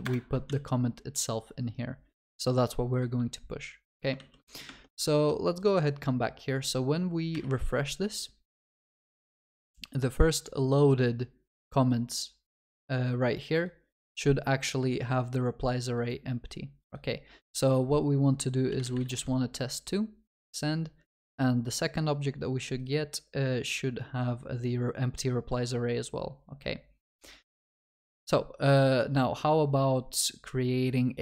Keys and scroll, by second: 0.0 ctrl+v, 0.0 Return.